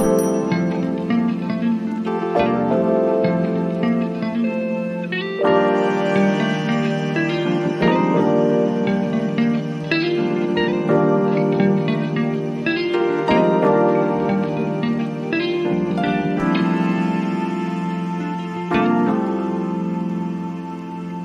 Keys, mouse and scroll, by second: 10.6 click, 10.8 click.